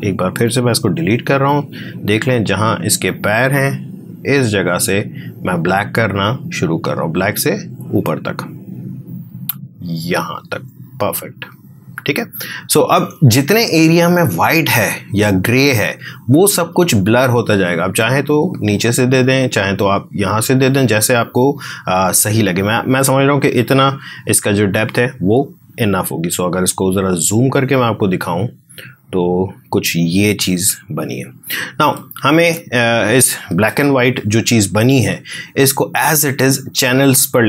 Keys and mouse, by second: 0.9 Delete, 4.7-14.1 drag, 17.7-22.5 drag, 24.2 space, 25.8 f, 26.2 space, 26.3 click, 27.6 space, 28.4 ctrl+click, 31.9 ctrl+click, 33.6 ctrl+d, 35.3 shift+click, 37.0 space, 37.2 click.